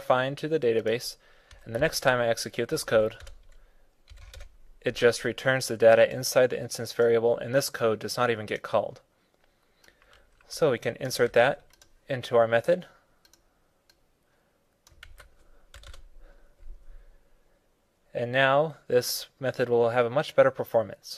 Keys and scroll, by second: 11.1 super+c, 14.9 super+v.